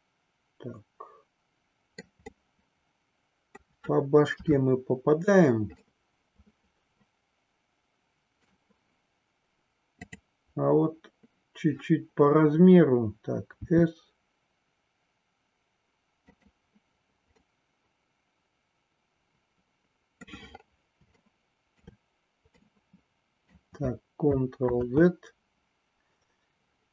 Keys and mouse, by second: 2.4-3.8 middle drag, 4.3 KP_3, 5.9-8.5 middle drag, 13.6 s, 16.3 click, 17.3-20.3 middle drag, 21.3 shift+middle click, 22.6-23.7 middle drag, 25.3 ctrl+z.